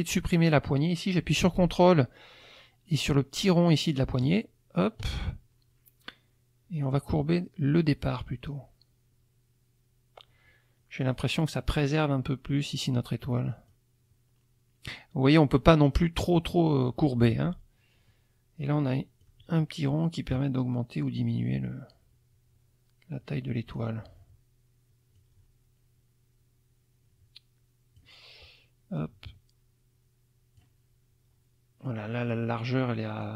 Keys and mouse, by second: 4.2 ctrl+click, 6.8-11.3 drag, 13.7-16.4 drag, 19.2-23.9 drag, 25.2-28.2 drag, 29.0-30.8 drag, 32.2 click, 32.8 click.